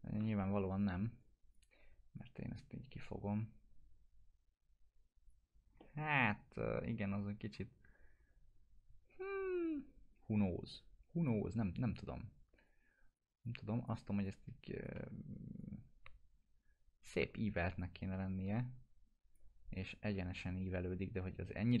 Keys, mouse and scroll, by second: 0.4 1, 0.8 scroll up 1, 1.2-1.8 click, 1.8 w, 2.2-5.3 drag, 5.4 scroll down 1, 5.8 alt+middle click, 9.2 scroll down 1, 9.8 scroll up 1, 10.7-11.3 drag, 14.9 e, 15.6-17.1 drag, 17.4 w, 17.8-19.6 drag, 19.7-21.8 drag.